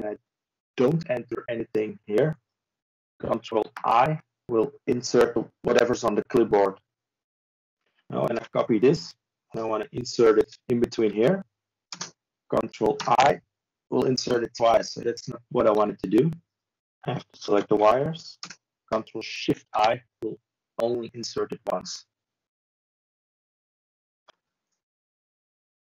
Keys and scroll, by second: 16.7 ctrl+space, 18.3 typing, 20.1 ctrl+b, 20.1 typing, 25.7 ctrl+space.